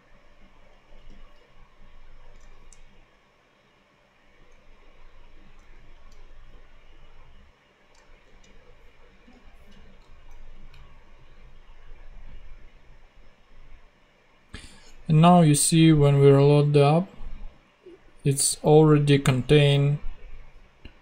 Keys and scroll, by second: 2.3 super+Tab, 5.5 super+Tab, 8.2 super+Tab, 10.3 ctrl+super+z.